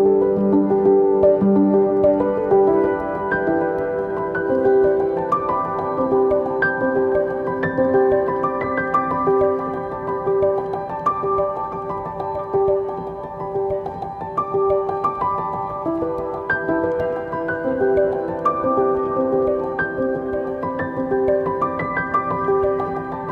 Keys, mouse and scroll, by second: 0.2-1.2 scroll up 1, 1.2-2.2 scroll down 1, 2.2 g, 10.9 click, 10.9-11.3 scroll down 1, 19.3 click, 20.3 click, 21.1 scroll down 1, 21.3-23.3 middle drag.